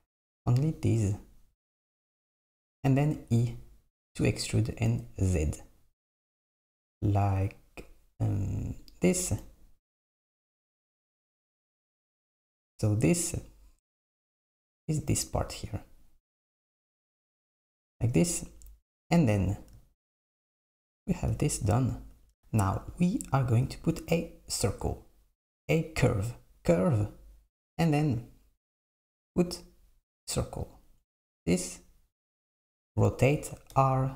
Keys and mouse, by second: 3.2 e, 18.6 Tab, 21.1 Tab, 22.2 Tab, 23.5 shift+a, 33.8 r.